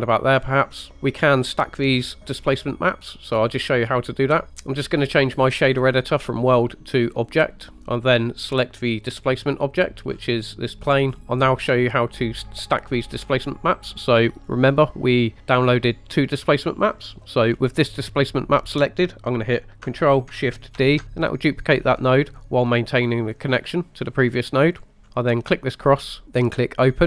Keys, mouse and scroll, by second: 3.5 click, 4.6 click, 6.4-7.5 drag, 9.2 click, 11.2 shift+middle click, 11.2 scroll down 2, 11.9-12.4 shift+middle drag, 13.0 shift+middle click, 13.3 scroll down 1, 14.4 click, 17.6 scroll up 1, 20.8 ctrl+shift+d, 24.8 click, 24.9 middle click, 25.0 scroll up 2, 25.9 click, 26.7 click.